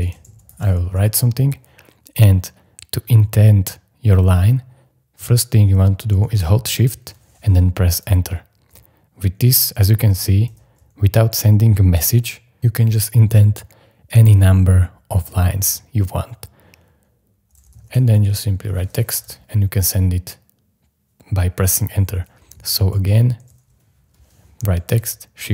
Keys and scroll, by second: 0.0-1.4 typing, 8.0 shift+Return, 9.7 shift+Return, 17.4-18.7 typing, 19.1 Return, 22.2-23.9 typing, 25.0 shift+Return.